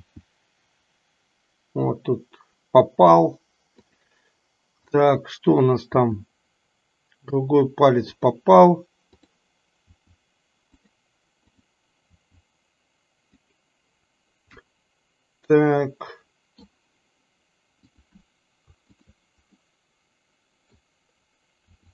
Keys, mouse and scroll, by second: 4.8 click, 5.9 r, 9.3 click, 9.9 r, 12.3 r, 14.7-16.8 middle drag, 17.8-18.3 drag, 18.8 shift+click, 19.7-20.9 middle drag, 21.8 r.